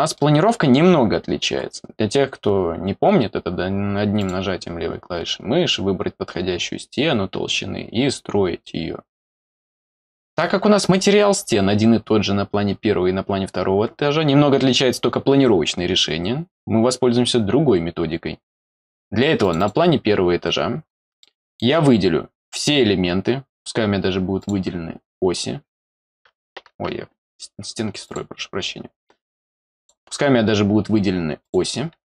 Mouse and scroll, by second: 0.1 middle click, 4.2 click, 19.4 click, 19.6 click, 21.2 middle click, 22.5 click, 24.4 click, 25.8 click, 28.0 click, 29.7 click, 31.4 click.